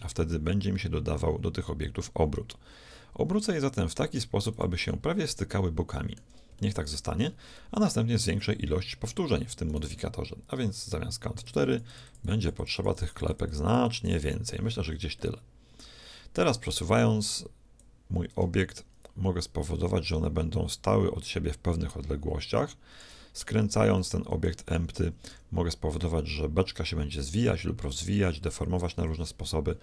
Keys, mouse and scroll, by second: 5.2-9.4 middle drag, 9.7-11.5 right drag, 11.5-16.0 drag, 15.2-17.1 middle drag, 17.8-19.6 drag, 24.0 middle click, 24.7-25.9 drag, 25.3 r, 25.9 right click.